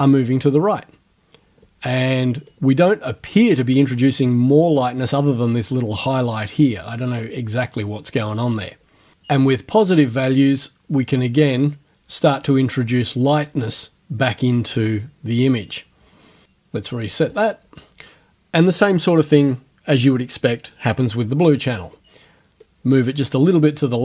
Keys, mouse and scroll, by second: 7.6 click, 9.4-16.4 drag, 17.3 click, 22.0 click.